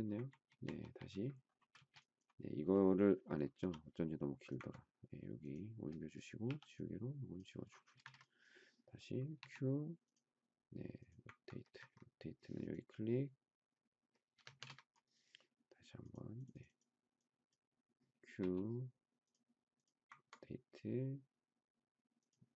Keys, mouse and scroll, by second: 1.7 space, 3.6 m, 6.4 e, 7.9 space, 8.0 Escape, 9.3 q, 11.8 ctrl+Escape, 14.3 Escape, 14.5 space, 14.6 Escape, 18.4 q.